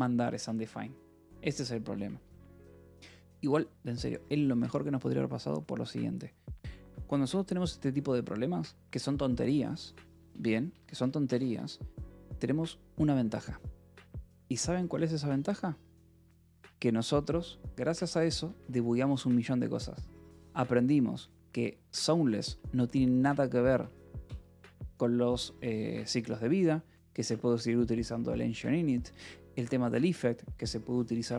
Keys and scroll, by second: 2.2-3.3 typing, 10.6 Escape, 10.8 k, 11.4 Escape, 18.1 b, 18.4 Escape, 21.3 shift+;, 21.9 j, 22.3 Return, 23.0-24.7 typing, 29.6 Escape.